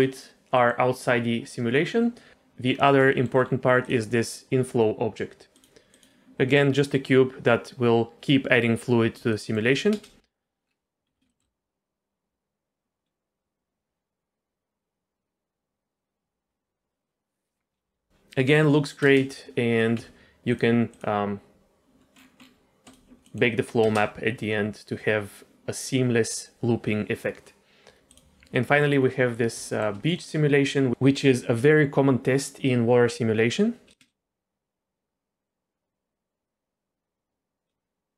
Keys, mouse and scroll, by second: 0.5 middle click, 1.7 middle click, 2.6 scroll up 1, 3.1 shift+middle click, 3.4-3.8 scroll up 1, 3.8 click, 5.5 click, 5.9 click, 6.4 middle click, 9.3 shift+middle click, 9.9 space, 10.7 scroll down 1, 11.1 z, 11.3 shift+middle click, 19.1 space, 19.7 scroll down 2, 19.9 z, 20.2-20.5 scroll up 1, 20.5 click, 20.9 click, 22.1-22.7 scroll down 2, 22.8 click, 23.3 middle click, 23.6 scroll up 2, 23.9 space, 28.9 scroll down 2, 29.6 shift+middle drag, 30.1 middle click, 34.0 space.